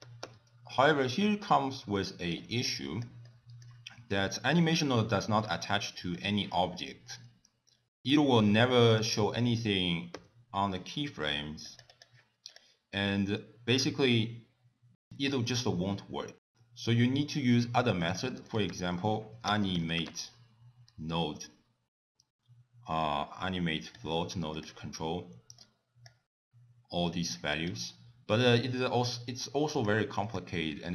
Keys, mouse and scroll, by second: 1.6 click, 3.1 middle click, 3.5 click, 3.8 middle click, 5.5 click, 7.4 click, 8.8 click, 9.5 i, 10.3 click, 10.7 click, 10.8 click, 12.7 i, 14.1 right click, 16.1 middle click, 16.5-17.2 scroll down 1, 17.2 scroll down 1, 18.0 click, 18.2 middle click, 18.7 ctrl+a, 25.6 click, 27.2 click, 27.7 click, 30.3 click.